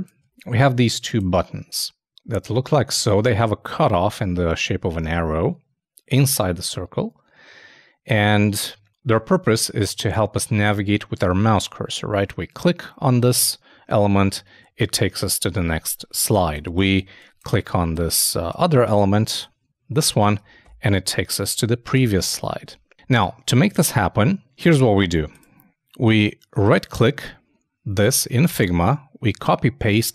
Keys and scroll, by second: 20.4 super+space, 20.6 super+-, 21.9 super+-, 22.7 super+space.